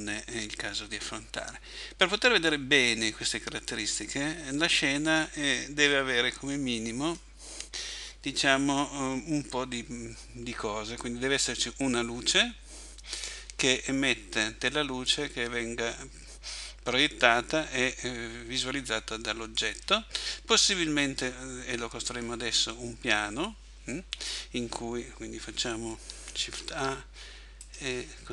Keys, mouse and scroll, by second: 4.1-4.5 scroll down 1, 5.5 middle click, 7.2-8.0 scroll down 5, 8.3 scroll down 1, 8.4 scroll up 1, 9.9 scroll up 1, 13.1 right click, 22.0-22.7 scroll up 2, 22.7 scroll down 1, 22.7-23.9 scroll down 2, 24.3 click, 26.5 shift+a.